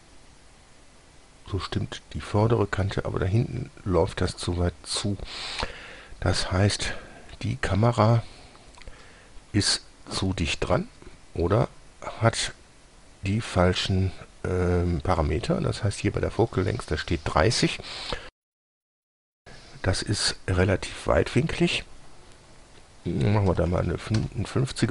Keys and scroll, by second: 23.8 KP_5, 24.0 KP_0, 24.4 Return.